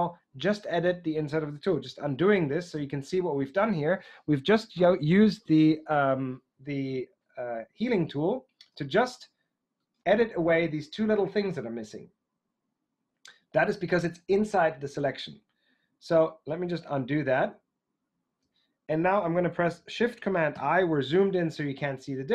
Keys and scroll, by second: 1.9 super+z, 2.7 super+z, 16.6 super+z, 17.2 super+z, 20.5 shift+super+i.